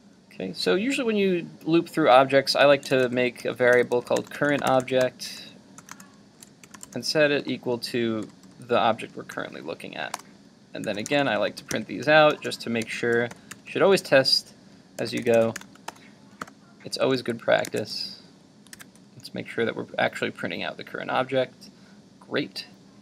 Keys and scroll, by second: 17.1 super+s, 17.8 super+Tab, 18.9 super+r.